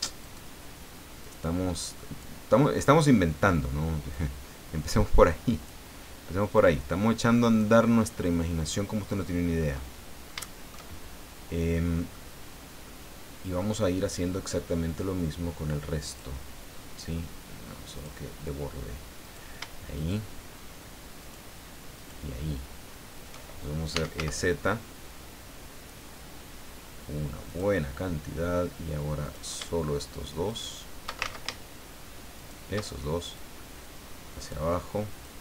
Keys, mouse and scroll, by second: 0.2 right click, 1.2 click, 4.1-5.8 drag, 6.5 click, 8.3-9.9 middle drag, 10.0 scroll down 2, 10.4 shift+middle click, 11.4 scroll down 2, 12.1-13.7 middle drag, 16.0 click, 17.9 click, 19.2 right click, 19.9 shift+right click, 21.2 shift+right click, 21.9 shift+right click, 23.6-24.6 typing, 27.4 click, 29.2 right click, 30.4 shift+right click, 31.2 ctrl+shift+z, 32.3 shift+right click, 33.3-34.7 drag, 35.2-35.4 drag.